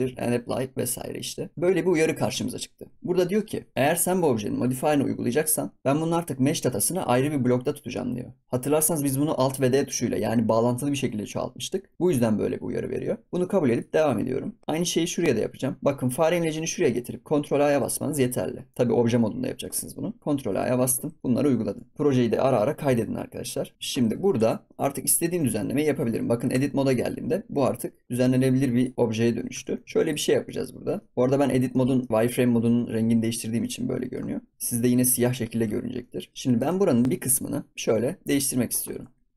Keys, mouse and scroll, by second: 17.4 ctrl+a, 20.3 ctrl+a, 21.3 ctrl+s, 23.9 ctrl+s, 24.3 Tab, 24.7 middle click, 25.0 scroll up 4, 25.3 Tab, 25.6 scroll down 4, 25.9 scroll up 6, 26.5 Tab, 26.6 scroll down 4, 26.8 middle click, 27.0-27.4 scroll up 9, 28.7 click, 29.1 scroll down 2, 29.5 Tab, 29.6 scroll up 5, 29.8 scroll down 3, 30.0 click, 30.4 middle click, 30.8 scroll up 1, 30.9 middle click, 31.1 scroll down 5, 31.3-31.6 scroll up 5, 31.6 shift+middle click, 32.1-32.8 scroll up 1, 32.8-33.5 scroll down 8, 33.5 middle click, 34.3 scroll down 1, 34.4 scroll up 4, 34.7 middle click, 35.3 scroll up 5, 35.6 ctrl+s, 35.7 scroll down 4, 36.0-37.0 middle drag, 37.0 KP_1, 38.3 click, 39.0-39.3 scroll up 7.